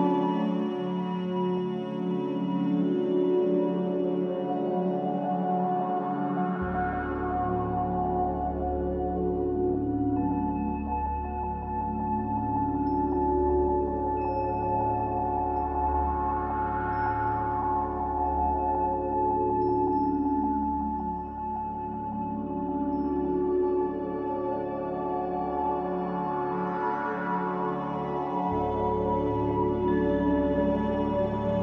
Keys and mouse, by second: 5.1 click, 5.1 right click, 6.5 click, 7.5 g, 11.7-12.1 drag, 12.4 g, 15.6 Tab, 15.6-17.4 middle drag, 17.6 Tab, 18.6-19.1 drag, 19.3 ctrl+s, 20.1-20.9 drag, 24.0 Tab, 24.5 Tab, 25.3 ctrl+s, 27.9 click, 28.6-31.6 drag.